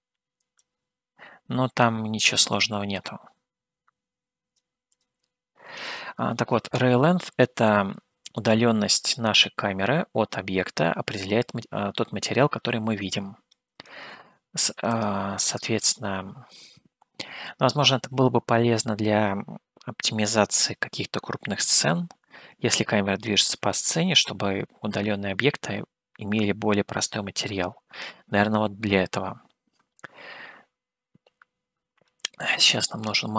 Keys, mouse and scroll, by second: 0.9-2.7 drag, 3.4-4.8 drag, 5.4 click, 14.1 shift+a.